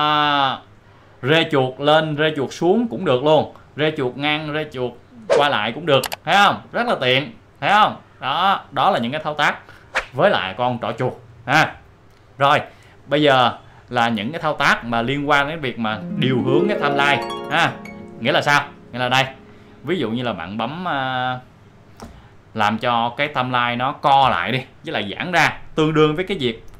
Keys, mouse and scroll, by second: 8.0 scroll up 1, 8.4 click, 23.4-25.1 drag.